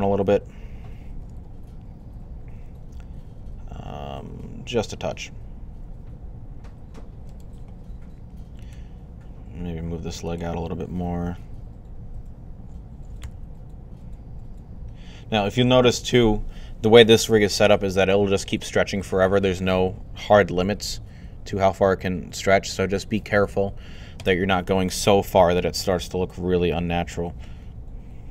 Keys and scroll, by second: 0.7-1.7 typing, 11.3 g, 12.8-13.6 typing, 28.0-28.3 typing.